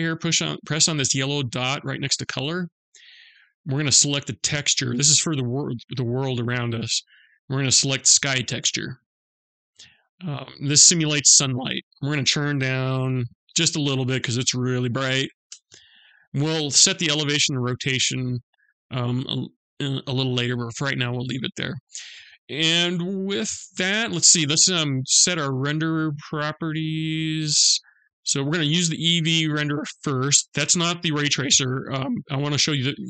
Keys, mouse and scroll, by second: 1.7 click, 9.3-10.7 scroll down 2, 10.7 click, 10.7 scroll down 1, 22.9-23.5 scroll down 1, 23.5-26.1 scroll up 2, 26.1 click.